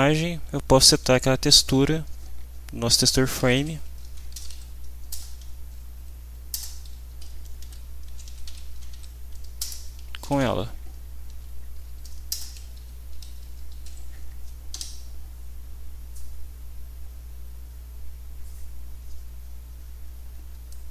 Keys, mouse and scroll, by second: 3.0-5.0 typing, 6.0 Down, 6.5 Return, 7.1 End, 7.3-11.2 typing, 9.6 Return, 11.8 Down, 12.3 Return, 12.9 Left, 13.2 Up, 13.8 Down, 14.7 F5, 20.7-20.9 drag.